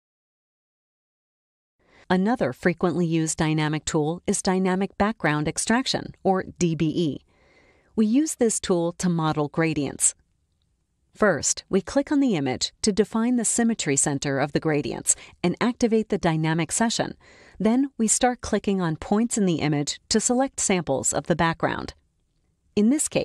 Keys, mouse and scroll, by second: 4.5 click, 6.8-7.8 drag, 8.8 click, 17.3 click, 17.3 scroll up 1, 18.1 click, 18.2 scroll up 1, 18.9 click, 19.6 click, 20.4 click, 21.0 click, 21.8 click, 22.3 click, 22.9 click.